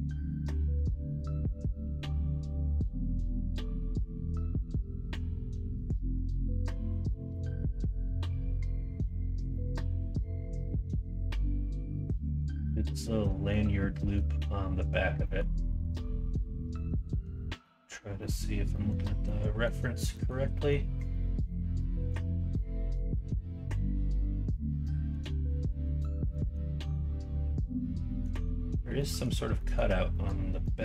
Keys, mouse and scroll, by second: 0.6 middle click, 1.4 Tab, 1.7 middle drag, 2.5 middle click, 2.7 middle click, 4.9 middle drag, 5.4-5.7 middle drag, 6.2 middle click, 6.6 shift+middle drag, 7.2 middle drag, 10.8 middle click, 11.4 middle click, 12.2 middle click.